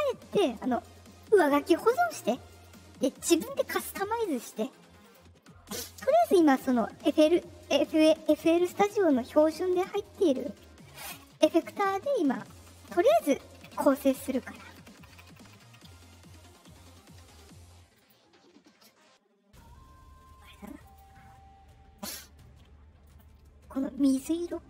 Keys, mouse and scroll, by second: 1.0 click, 2.6 click, 5.0 click, 10.2 click, 14.8 Left, 17.9 click, 20.8 click, 21.9 click, 23.0 drag, 24.1-24.6 drag.